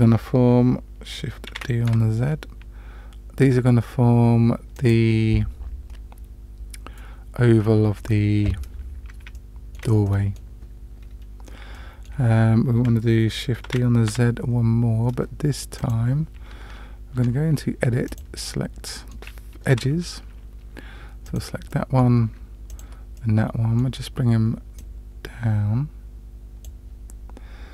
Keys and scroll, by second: 1.5 shift+d, 13.7 shift+d, 17.2 Tab, 19.7 2.